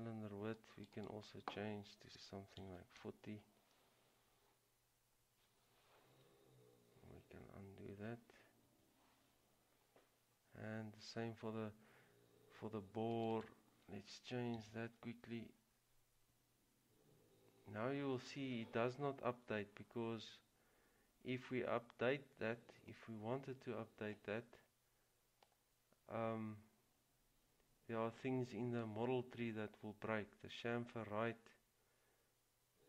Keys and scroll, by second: 2.7 typing, 8.8 ctrl+z, 14.5-15.3 typing.